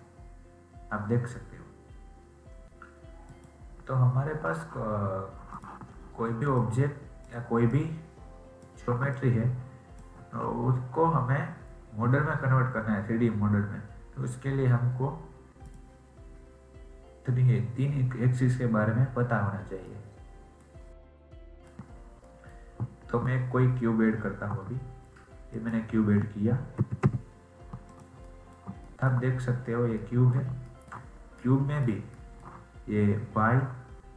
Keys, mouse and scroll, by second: 3.2-12.2 drag, 15.6-18.8 drag, 19.8-23.1 middle drag, 23.1 shift+a, 26.7 g, 28.2 middle click, 29.2-29.9 scroll up 6, 29.9-31.1 middle drag, 31.1 scroll up 2, 31.4 middle click, 31.8 scroll down 2, 32.0-34.1 shift+middle drag.